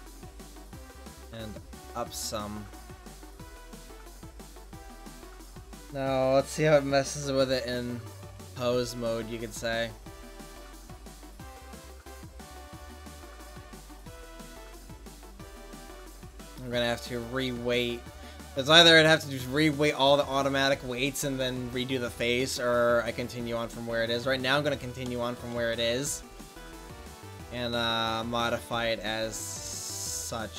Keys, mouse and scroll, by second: 4.6-5.8 right drag, 8.5 Tab, 24.4 click, 25.0 middle click, 29.9-30.5 right drag.